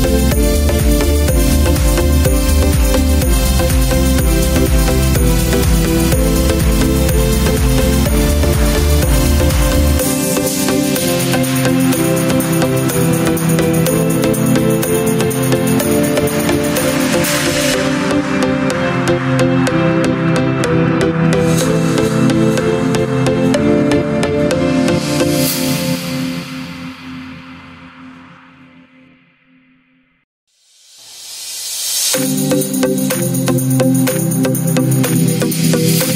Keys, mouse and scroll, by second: 23.5 KP_0.